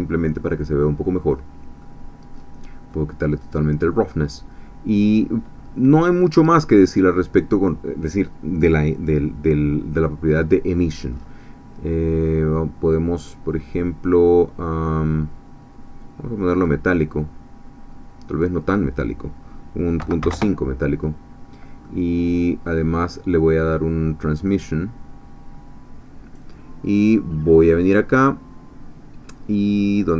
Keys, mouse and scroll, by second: 1.8-2.9 middle drag, 2.9-3.9 drag, 4.9-5.6 scroll down 1, 6.2-7.2 middle drag, 11.1-13.5 scroll up 2, 16.0-16.8 drag, 18.3-20.0 drag, 20.0 ., 20.2 5, 20.3 Return, 21.8-22.9 middle drag, 24.6-26.5 drag.